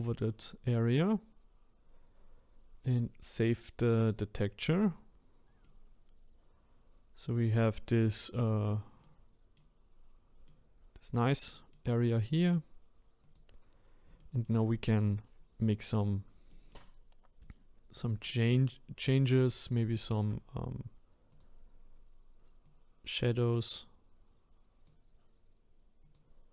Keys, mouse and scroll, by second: 5.6-7.6 middle drag, 7.6-9.0 scroll up 5, 9.0-13.2 middle drag, 13.2 click, 14.2-15.9 shift+middle drag, 15.9 scroll down 3, 16.5-19.6 shift+middle drag, 19.6-19.9 scroll up 1, 19.9 shift+middle click, 20.5-21.3 scroll up 1, 21.3-25.7 drag, 26.0 click.